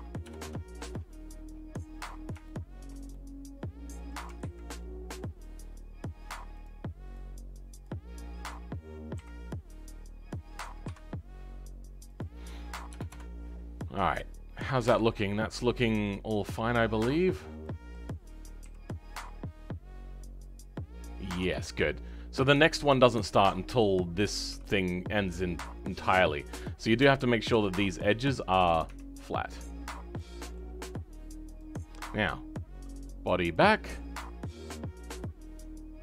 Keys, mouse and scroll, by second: 0.3 click, 0.8-1.4 scroll down 3, 1.4-2.4 scroll up 2, 2.4-4.3 shift+middle drag, 4.3 ctrl+z, 5.3-6.4 scroll down 2, 6.4-7.7 drag, 9.1 s, 13.3-13.7 scroll down 2, 13.7-16.2 middle drag, 16.2-17.2 scroll up 2, 17.2 click, 17.5-18.5 middle drag, 18.5 g, 21.8-22.4 scroll down 1, 22.4-24.4 shift+middle drag, 24.4 g, 29.1-30.1 scroll down 10, 30.1-31.4 middle drag, 31.4-36.0 drag.